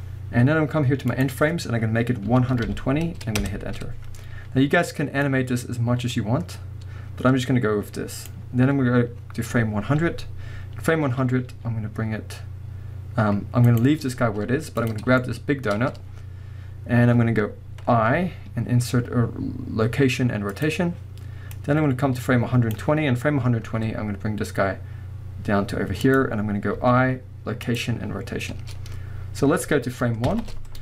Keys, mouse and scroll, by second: 1.1-13.8 drag, 4.1 Return, 11.5 g, 13.8 right click, 14.8 click, 15.2-21.7 shift+middle drag, 21.7-26.1 drag, 23.6 g, 28.7-29.7 scroll down 2, 30.3 shift+Left.